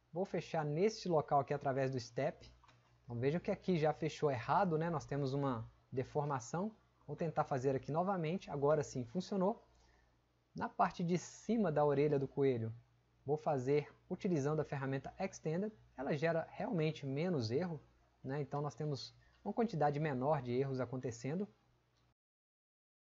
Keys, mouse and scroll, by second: 5.4 click.